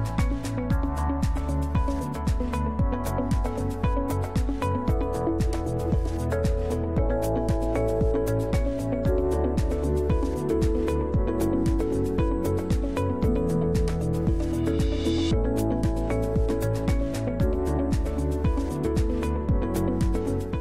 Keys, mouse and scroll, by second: 1.3 click, 2.7 scroll up 1, 4.0 click, 5.4 Right, 5.8 Left, 6.9 BackSpace, 7.0 6, 7.7 Return, 9.2 click, 11.1 click, 12.4-13.9 drag, 14.6-16.4 drag, 17.5 click, 18.2 click, 18.6-20.6 drag.